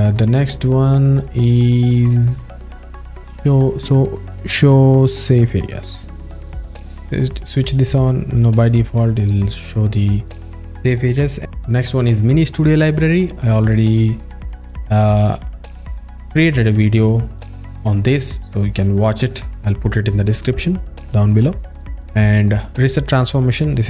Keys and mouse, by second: 0.5 click, 1.2 click, 1.9 alt+middle click, 6.0 click.